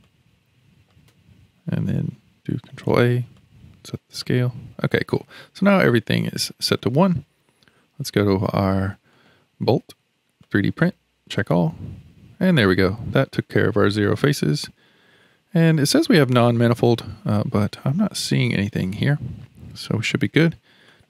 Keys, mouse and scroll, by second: 0.0 click, 2.7 ctrl+a, 5.1 click, 5.8-9.1 middle drag, 9.1 click, 10.4 click, 17.3 middle click, 20.9 click.